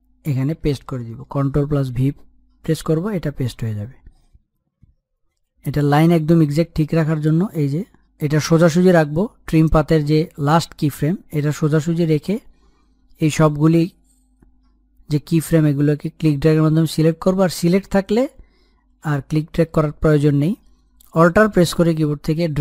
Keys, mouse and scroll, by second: 0.9-2.4 scroll up 1, 3.7 ctrl+v, 5.4 scroll down 1, 6.1-6.7 scroll up 1, 6.7 click, 7.5-8.7 scroll down 1, 8.7-10.8 drag, 12.9-14.8 scroll up 1, 15.7-19.6 drag.